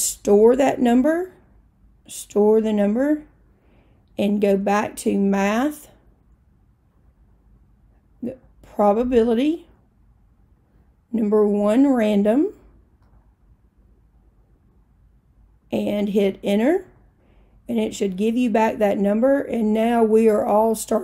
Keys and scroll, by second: 8.4 Right, 8.7 Right, 9.2 Right, 13.1 1, 16.9 Return.